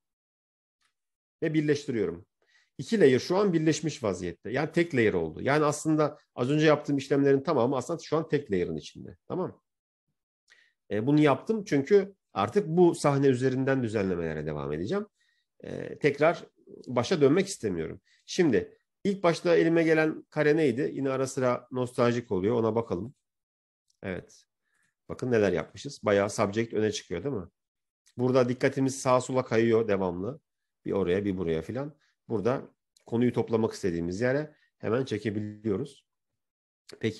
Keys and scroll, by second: 0.6 ctrl+e.